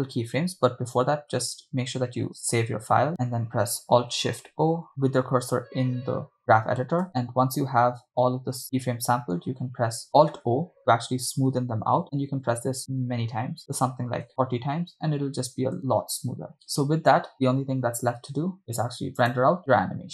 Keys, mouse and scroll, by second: 4.7 alt+shift+o, 7.1 alt+shift+o, 7.1-7.7 scroll down 2, 7.7-9.3 scroll down 8, 8.8 shift+middle click, 9.4-10.0 scroll down 2, 10.8-13.6 alt+o, 13.8-14.8 alt+o, 16.0 shift+space, 18.5 shift+space, 19.6-20.1 drag.